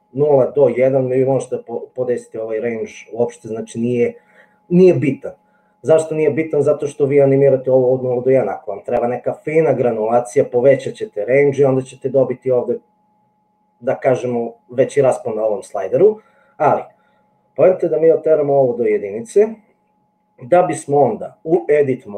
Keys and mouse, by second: 17.4-19.0 drag, 21.6 Tab.